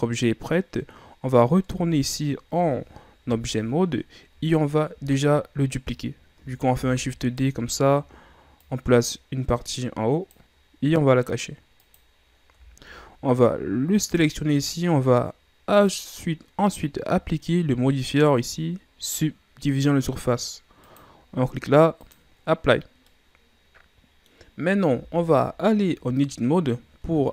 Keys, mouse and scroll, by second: 0.5-1.7 scroll up 1, 1.7 Tab, 3.2 KP_1, 4.7 shift+scroll up 7, 6.7 shift+d, 8.6-11.7 drag, 11.8 click, 12.6 shift+scroll down 3, 13.9 right click, 15.7-18.7 drag, 20.8-23.0 drag, 23.0-24.9 middle drag, 24.9 Tab, 25.8-27.3 middle drag.